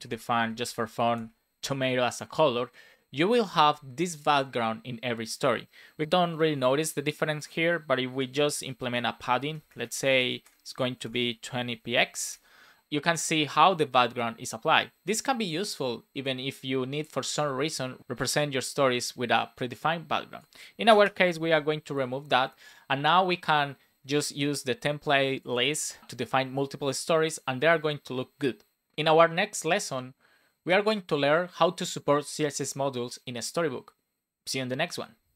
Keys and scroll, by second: 1.1 super+s, 8.2 Return, 9.6-11.0 typing, 11.9 Right, 12.2 super+s, 20.8 BackSpace, 21.3 super+s.